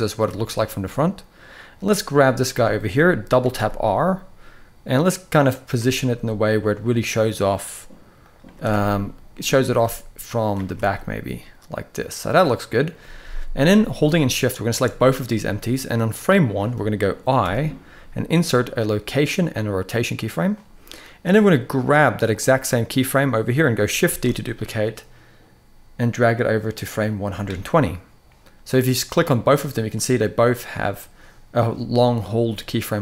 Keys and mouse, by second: 1.8 click, 2.4 shift+middle click, 3.2 r, 3.3 r, 5.6 r, 7.9 click, 8.2 r, 8.4 r, 9.3 drag, 9.5 r, 10.3 r, 10.5 r, 15.8 click, 17.1 i, 20.9 drag, 21.1-22.1 drag, 23.8 shift+d, 26.8 click, 28.9 click, 32.1 click.